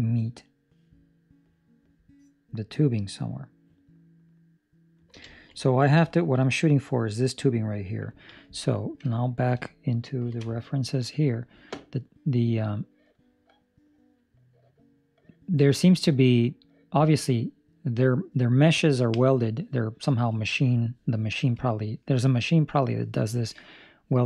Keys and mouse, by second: 5.2 ctrl+middle click, 5.5 middle click, 6.0 ctrl+middle click, 6.4 middle click, 7.4 middle click, 8.0 middle click.